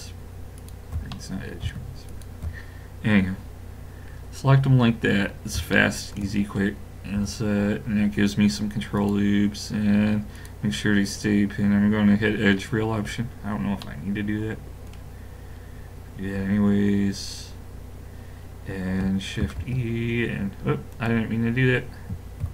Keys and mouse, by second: 2.7 click, 4.1-9.0 middle drag, 7.2 i, 10.4 click, 12.6 middle click, 14.0-18.7 middle drag, 19.4 shift+e, 22.4 ctrl+z.